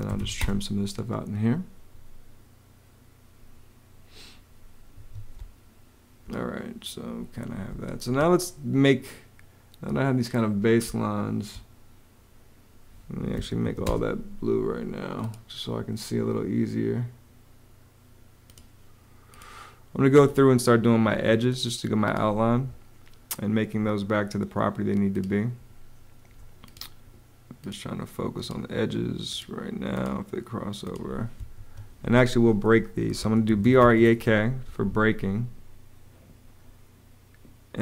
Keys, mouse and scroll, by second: 0.0-0.5 typing, 4.8 Escape, 5.2 space, 7.5 space, 10.7 space, 13.2 m, 13.4 a, 13.7 space, 20.9 Home, 31.4 Home, 32.8-34.1 typing.